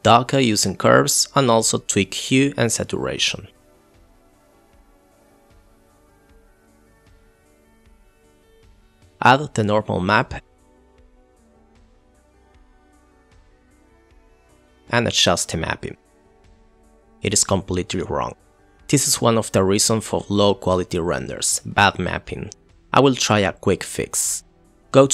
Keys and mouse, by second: 0.2 click, 1.1 click, 1.6 click, 2.4-2.7 drag, 3.2 shift+a, 4.7 click, 4.9 KP_Decimal, 5.8 click, 6.7 click, 10.2 click, 10.5 click, 11.7 click, 13.5 click, 13.6 click, 13.9 middle click, 14.2 middle drag, 14.4 middle drag, 14.5 KP_Divide, 15.5-16.3 middle drag, 16.7-17.1 middle drag, 17.3 click, 18.7 click, 19.1-19.8 drag, 20.9 click, 22.7 middle click, 23.7 click, 24.0 ctrl+l, 24.8 click.